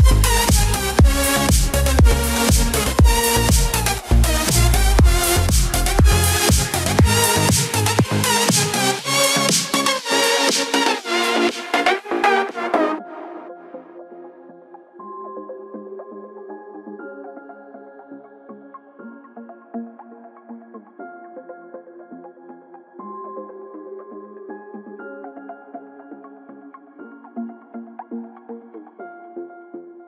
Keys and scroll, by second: 4.5 ctrl+z, 21.8 ctrl+z, 29.3 ctrl+z.